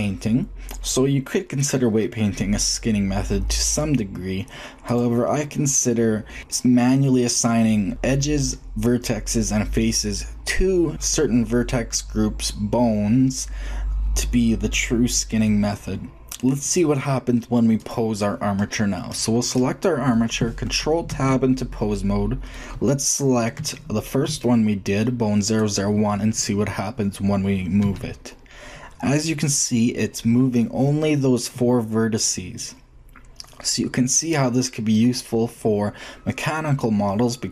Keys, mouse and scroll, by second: 3.6-6.1 drag, 10.9 click, 16.4-18.5 drag, 19.2-21.2 drag, 20.9 ctrl+Tab, 21.7-23.5 drag, 25.2-26.2 shift+drag, 26.9 click, 27.6 g.